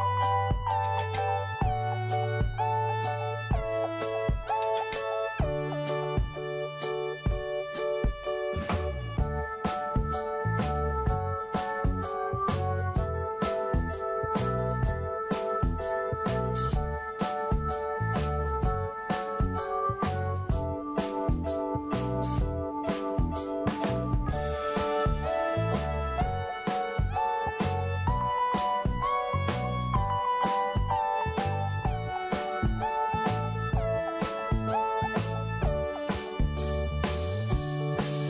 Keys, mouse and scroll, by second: 1.2 middle click, 3.3 click, 4.2 typing, 4.7-5.4 scroll down 1, 5.7 click, 11.5-12.9 middle drag, 13.1 click, 15.4 middle click, 16.2 scroll up 1, 17.3 scroll down 1, 18.8 click, 20.1 middle click, 21.3 click, 23.8-24.4 scroll up 1, 24.4 click, 25.0 right click, 25.9-35.9 drag, 36.7-37.4 scroll down 1, 37.6 click.